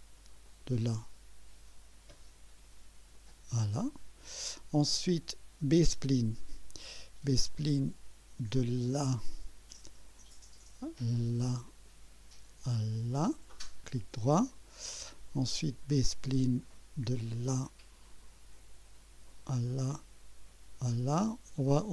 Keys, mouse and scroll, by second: 0.5 click, 3.2 click, 5.7 click, 9.1 click, 11.7 click, 13.1 click, 13.8 right click, 17.3 click, 19.7 click, 20.9 click, 21.6 right click.